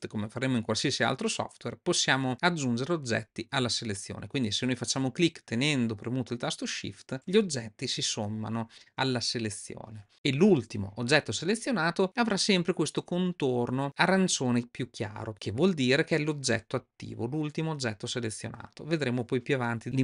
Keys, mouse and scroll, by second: 3.0 shift+click, 4.3 shift+click.